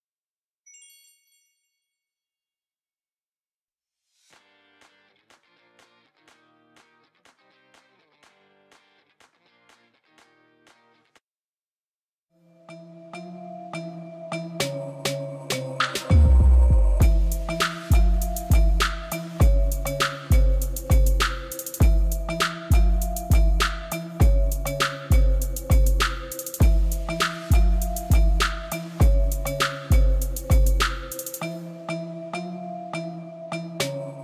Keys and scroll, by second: 15.3 Tab, 25.5 ctrl+b, 30.6 Tab.